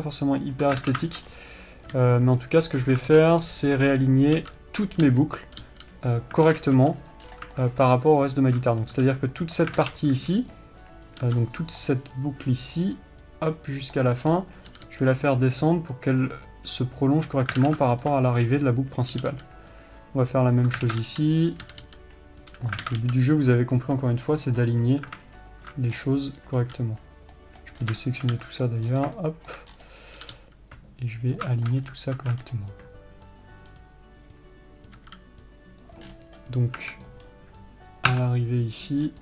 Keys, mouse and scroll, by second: 1.0 click, 1.2 alt+a, 1.4-5.9 shift+middle drag, 1.6-3.0 scroll up 1, 3.0 b, 3.1-3.5 scroll down 1, 3.5 alt+a, 3.7 scroll up 1, 5.2 b, 5.9 click, 6.0 g, 6.9 alt+a, 7.5 b, 7.6-7.9 scroll down 1, 7.9-8.6 shift+middle drag, 8.6 alt+shift+click, 9.8 c, 9.9 right click, 10.1 alt+a, 11.2 b, 14.4 click, 14.7 scroll up 1, 15.1 g, 18.0 alt+a, 18.3-21.2 shift+middle drag, 19.3 b, 21.2 alt+a, 21.9 b, 23.2 alt+a, 25.7 alt+shift+click, 26.3 scroll down 1, 28.0 b, 28.2 scroll down 1, 28.4-39.2 shift+middle drag, 29.0 b, 29.2 scroll up 1, 30.1-30.4 scroll up 1, 30.6 g, 32.2-32.5 alt+scroll up 1, 32.5 alt+a, 32.8 scroll up 1, 36.2 b, 36.4 scroll down 1, 37.2 Tab, 37.6-38.5 scroll up 2, 38.5 Tab.